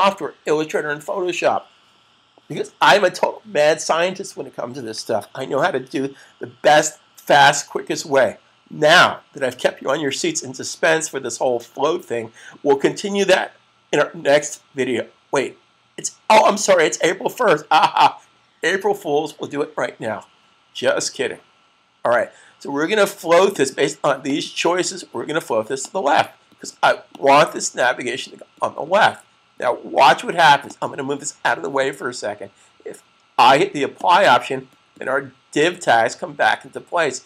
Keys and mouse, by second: 23.4 click, 30.5 click, 33.8 click.